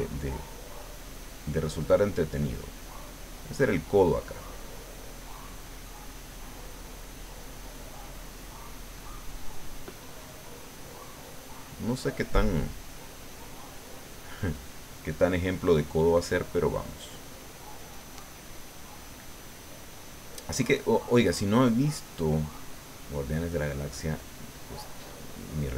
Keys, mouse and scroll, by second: 0.7 click, 1.4 click, 2.4 click, 3.4-6.0 drag, 6.1-8.7 middle drag, 9.5-14.1 drag, 14.8 click, 15.5 click, 16.3-17.6 drag, 18.1 click, 18.7 click, 21.5-22.6 middle drag, 22.9 middle click, 24.5-25.7 drag.